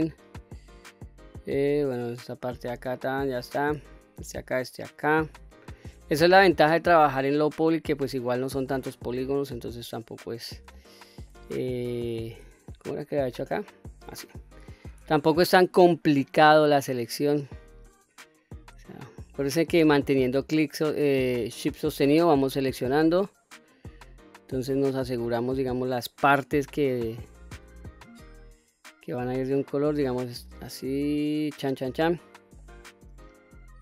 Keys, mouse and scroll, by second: 0.4-3.1 middle drag, 3.8 shift+click, 4.7 shift+click, 5.3 middle click, 6.0-6.3 scroll up 2, 6.5 shift+middle drag, 7.2 shift+click, 7.9 shift+click, 8.5 middle click, 9.5 shift+click, 10.1 shift+click, 10.6-11.1 middle drag, 11.4 shift+click, 12.3-12.8 scroll down 1, 12.8-14.8 middle drag, 15.4 shift+click, 16.2 shift+click, 16.9 shift+click, 17.4 shift+click, 18.2 shift+click, 18.8 middle click, 19.6 shift+middle click, 20.7 shift+click, 21.5 shift+click, 21.9 shift+click, 22.3 shift+click, 22.8 shift+click, 23.5 shift+click, 24.6 shift+click, 25.0 shift+click, 26.1 shift+click, 26.8 shift+click, 27.7-32.4 middle drag, 32.8-33.2 scroll down 1, 33.2-33.8 middle drag.